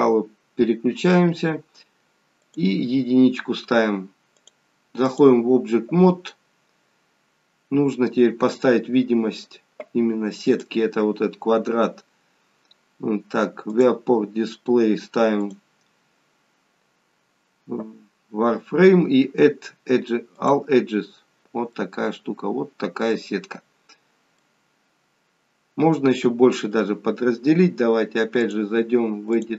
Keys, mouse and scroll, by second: 2.5 click, 4.5 click, 10.6 click, 11.8-13.5 scroll down 1, 13.5 scroll down 1, 13.8 click, 14.1 scroll down 1, 14.7-15.4 scroll down 3, 15.4 click, 20.4 click, 21.4 scroll up 1, 21.7 middle click, 24.0 scroll down 1, 24.3 middle click, 28.7 click.